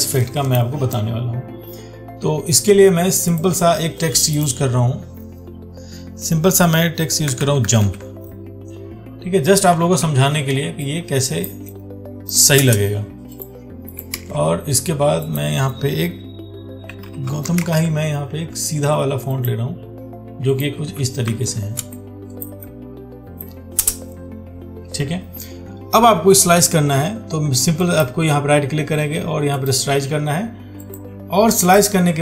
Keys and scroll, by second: 10.3 ctrl+t, 14.4 ctrl+a, 21.6 ctrl+t.